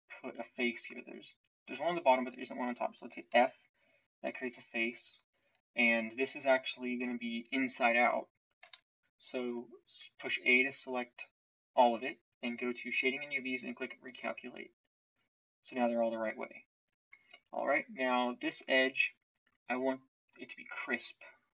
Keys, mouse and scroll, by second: 3.3 f, 7.9 a, 8.6 a.